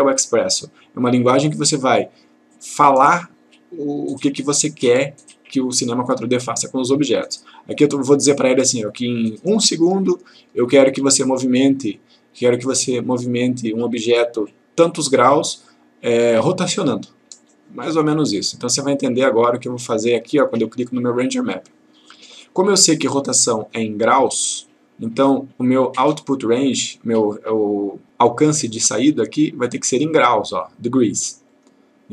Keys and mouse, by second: 6.8-7.4 click, 18.5-20.0 drag, 29.5 click, 31.6 click.